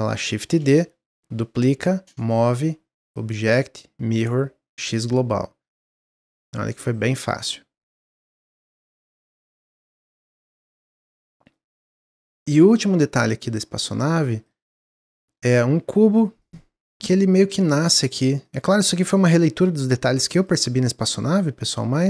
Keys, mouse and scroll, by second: 0.4 shift+d, 1.6 click, 2.9-5.7 drag, 6.7 click, 7.0-8.0 middle drag, 8.0 scroll down 1, 8.3-8.9 middle drag, 8.9 click, 9.6 click, 10.3 drag, 10.6-11.1 scroll up 1, 11.1 scroll up 2, 11.1 click, 11.5-11.9 middle drag, 11.9-15.7 drag, 15.7 s, 17.0 click, 17.8 ctrl+z, 18.4 click, 19.3 s, 21.0 click.